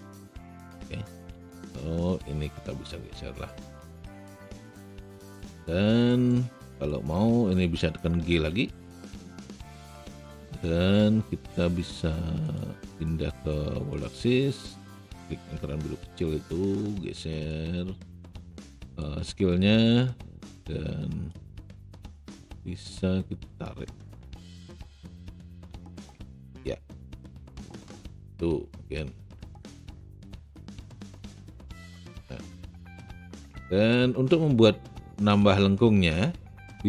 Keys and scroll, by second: 1.3 alt+w, 8.3 g.